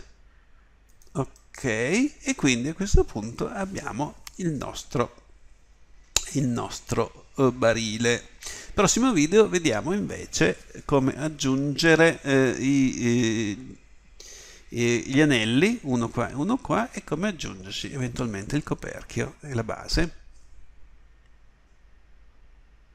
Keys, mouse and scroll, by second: 1.4 click.